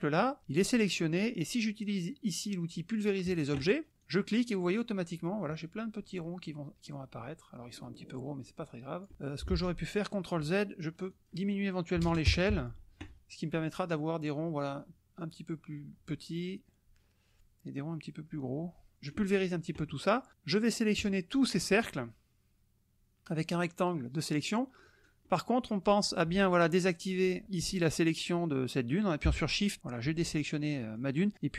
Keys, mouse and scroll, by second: 3.3 click, 4.0-9.1 drag, 9.5 ctrl+z, 11.1 click, 11.9 KP_5, 12.0 KP_0, 12.2 KP_Enter, 13.3-19.3 drag, 21.0 click, 21.8-25.0 drag, 30.6 shift+click.